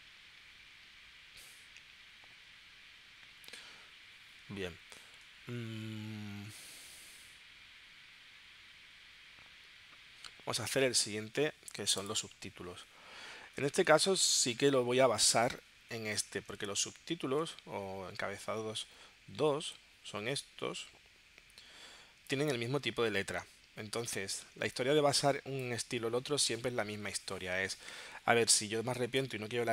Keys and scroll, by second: 24.6 space.